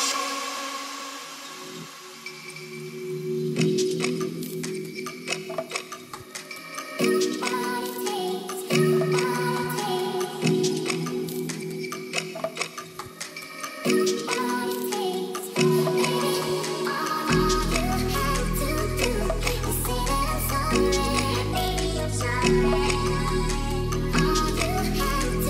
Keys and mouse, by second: 2.5 click, 20.4-21.0 drag, 23.1 click, 23.4-23.7 middle drag.